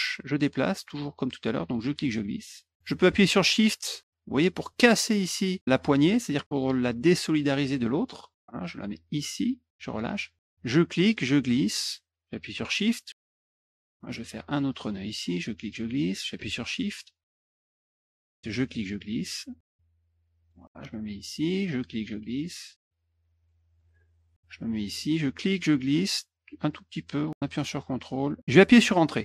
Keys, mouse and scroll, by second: 10.6-13.5 drag, 15.1-17.2 drag, 17.3 middle click, 18.4-20.5 drag, 21.7-23.8 drag, 25.2 click.